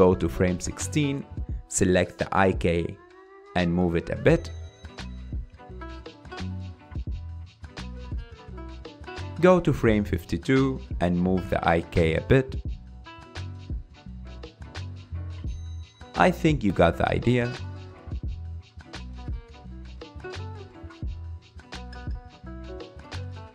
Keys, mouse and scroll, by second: 2.0 click, 4.3 click, 4.8-6.4 middle drag, 6.4 g, 10.5-12.1 drag, 12.1-12.8 middle drag, 12.8 g, 16.2 g, 17.8-18.2 drag, 18.2-21.5 typing, 18.9 click, 20.2 click, 21.2 click, 22.6-23.2 drag, 23.2 g.